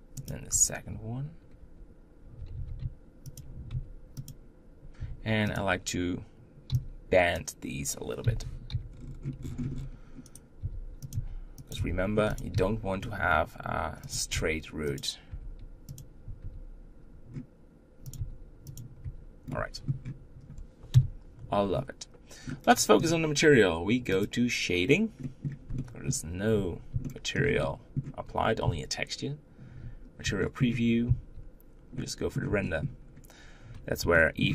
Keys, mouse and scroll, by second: 0.0 click, 0.3 Tab, 1.4 Tab, 2.0 Tab, 2.4 g, 3.5 Tab, 4.0 click, 4.8 Tab, 5.3 click, 7.1 b, 8.5 g, 10.3 r, 14.1 Tab, 14.7 click, 15.1 Tab, 15.7 click, 16.2 r, 17.9 g, 18.8 Tab, 19.3-20.7 middle drag, 20.7 KP_1, 21.3 scroll down 2, 22.2-23.8 middle drag, 23.8-25.0 drag, 25.5-29.6 middle drag, 29.6 z, 30.2-32.8 shift+middle drag, 32.8 scroll up 2, 33.9-34.5 shift+middle drag.